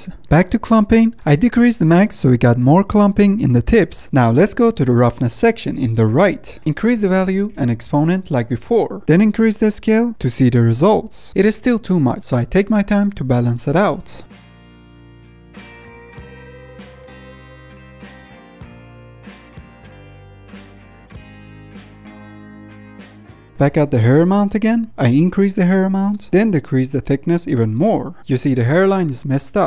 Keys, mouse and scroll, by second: 0.2 middle click, 0.6-1.3 scroll down 2, 0.8 middle click, 1.3 middle click, 1.7-2.3 scroll up 2, 2.3 click, 3.1 middle click, 3.5-4.2 scroll down 6, 3.7 middle click, 4.2-5.7 middle drag, 5.9 middle click, 6.4-6.8 scroll up 2, 6.6 middle click, 6.8 middle click, 7.5 click, 8.3 middle click, 8.5-11.3 drag, 11.3 ctrl+z, 12.2 click, 13.9-14.9 middle drag, 14.9 click, 16.1 click, 18.1 scroll down 5, 18.3 middle click, 18.4 scroll up 6, 18.5 middle click, 18.6 scroll down 4, 18.8 middle click, 19.1 scroll up 2, 19.3 click, 19.7 middle click, 19.8-20.2 scroll down 7, 20.2 shift+middle click, 20.5 scroll up 2, 20.6 shift+middle click, 21.0-21.3 scroll down 1, 21.3-21.7 scroll up 2, 21.4 shift+middle click, 21.7 middle click, 21.8 click, 22.0 BackSpace, 22.5 middle click, 22.6 click, 23.2 middle click, 23.2 scroll down 2, 24.1 KP_0, 25.1-26.9 middle drag, 26.9-28.2 drag, 28.2 middle click, 28.8 scroll up 2, 29.0 ctrl+Tab, 29.5-29.6 drag.